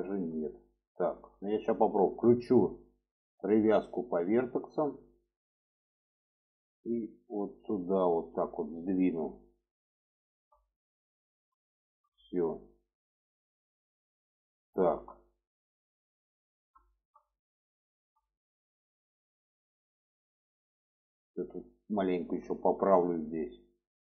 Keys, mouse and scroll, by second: 0.6 shift+middle click, 3.0-4.7 drag, 5.9-8.1 ctrl+drag, 9.0 middle click, 10.0 shift+middle click, 10.5 middle click, 11.5 shift+middle click, 12.2 middle click, 13.3 click, 13.7-14.9 middle drag, 15.2-16.4 middle drag, 16.6 shift+middle click, 17.6 shift+middle click, 19.2 shift+middle click, 21.5 click, 21.8 shift+middle click, 23.1-24.1 drag.